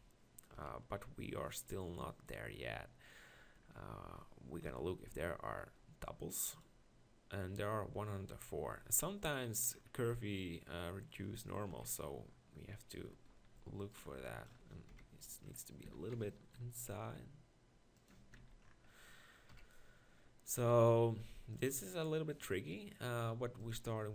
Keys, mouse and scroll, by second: 0.5 KP_1, 3.8 Tab, 5.0 ctrl+l, 8.3 Tab, 11.7 KP_1, 13.0 Tab, 13.6 z, 14.1 b, 14.9 KP_7, 15.8 s, 18.2 Tab, 18.4 z, 19.5 KP_1, 20.6 s.